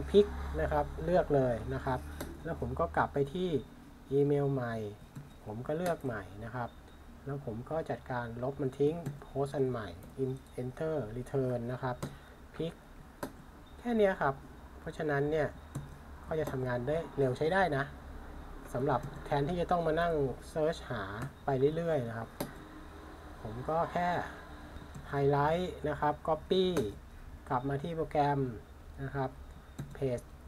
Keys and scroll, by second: 5.2 super+c, 5.8 typing, 9.1 super+v, 10.0 Return, 12.0 p, 15.7 super+c, 19.0 super+v, 20.0 Return, 21.2 p, 24.9 super+c, 29.8 super+v.